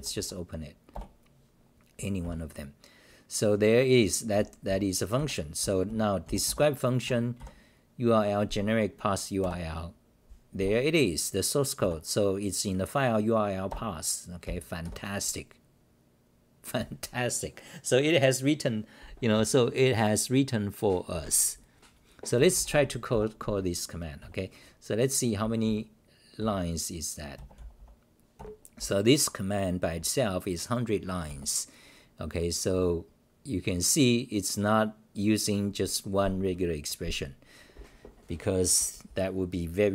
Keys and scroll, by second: 0.1 Left, 0.9 Return, 2.2 -, 2.7-3.4 scroll down 6, 4.1-6.1 typing, 7.0 Home, 8.4 k, 9.4 Return, 10.6 w, 11.8 Tab, 13.7 Return, 14.8 Delete, 14.8 -, 15.6-16.4 scroll down 2, 22.3-24.2 typing, 25.6 d, 26.4 1, 28.3 ctrl+g, 28.8-29.4 s, 29.0 Delete, 32.7 Home, 32.7 s, 33.1-36.1 scroll up 42, 33.1 Delete, 36.7-38.2 scroll up 10, 38.2 scroll up 1.